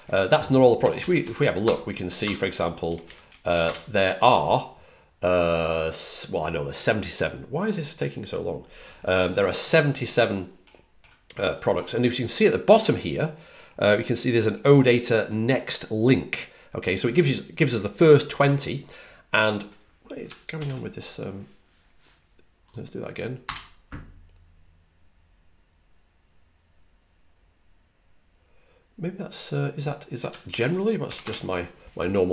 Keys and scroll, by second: 0.9 super+l, 1.5 BackSpace, 1.8 BackSpace, 2.8 typing, 20.5 super+l, 30.4 super+t, 31.1 Return.